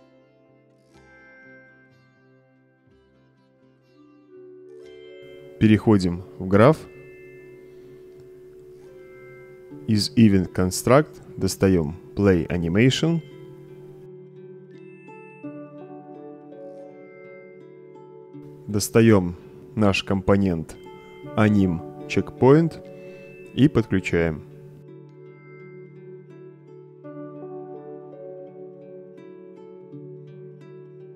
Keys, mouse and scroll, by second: 0.5 click, 5.7 click, 6.6-7.7 right drag, 7.8 click, 9.0 right click, 9.6 click, 10.3-10.8 right drag, 11.5-11.8 drag, 13.0-15.8 typing, 16.5 Return, 17.8-18.5 drag, 18.9-19.3 right drag, 21.4-23.0 drag, 23.9-24.8 drag, 27.7 click, 28.3 click.